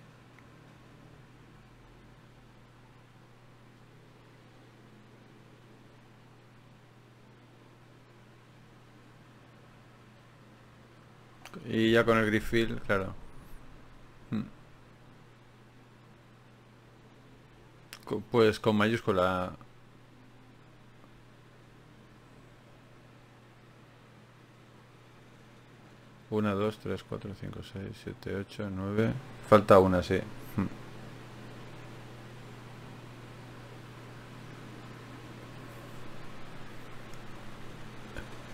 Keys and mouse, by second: 1.9-15.3 right drag, 2.1-5.7 drag, 6.9 ctrl+b, 8.3-9.9 drag, 11.9-15.3 drag, 11.9 shift+q, 26.4 ctrl+r, 28.3 g, 30.0 g, 32.5 shift+q, 36.4-37.9 drag, 37.9 shift+q.